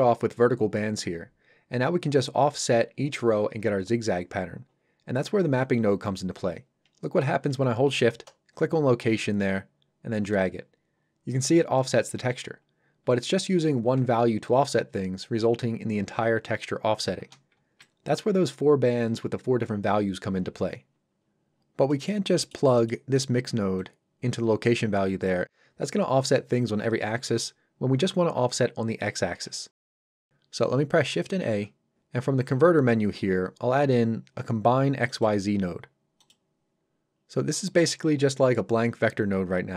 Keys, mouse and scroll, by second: 8.3 shift+click, 21.2-21.5 scroll down 1, 21.9 middle click, 22.1 scroll down 1, 22.4 middle click, 29.7 ctrl+right click, 29.7 scroll up 1, 35.1 click, 37.2 scroll up 1.